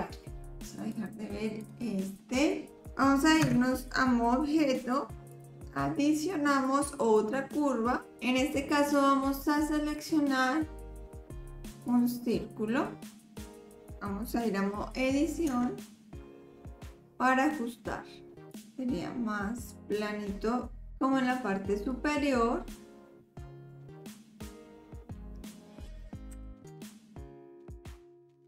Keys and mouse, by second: 0.9 click, 1.6 click, 2.2 click, 3.4 Tab, 5.3-12.3 drag, 15.5 Tab, 18.6-20.9 drag, 20.9 ctrl+z, 21.9-25.6 drag, 26.3 KP_7, 26.8 shift+click, 27.7 click, 28.2 click.